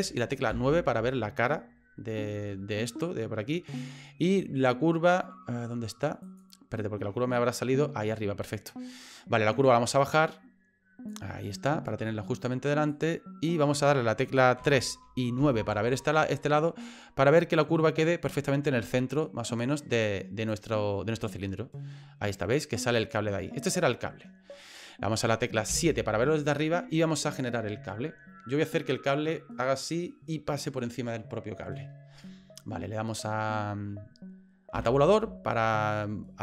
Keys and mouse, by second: 0.5 KP_9, 4.4 middle click, 9.9-11.1 drag, 12.9 click, 14.6 KP_3, 15.4 KP_9, 17.6 click, 20.1 click, 21.5 middle click, 23.1 click, 25.7 KP_7, 34.8 Tab.